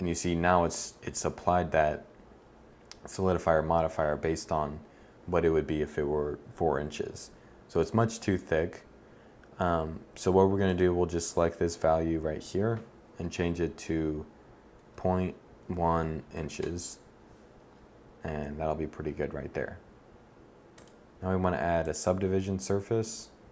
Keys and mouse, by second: 16.1-20.2 middle drag.